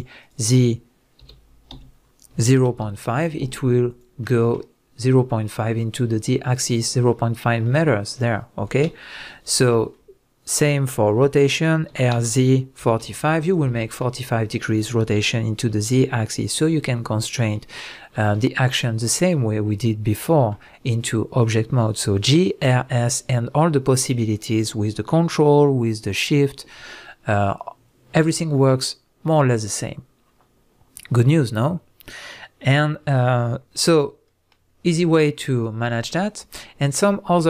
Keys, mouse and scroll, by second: 0.2 shift+click, 1.2 g, 4.0 click, 4.2-13.5 middle drag, 9.4 ctrl+z, 11.9 r, 13.5 click, 13.8-35.5 middle drag, 17.7 ctrl+z, 35.5 click, 36.2-37.4 middle drag.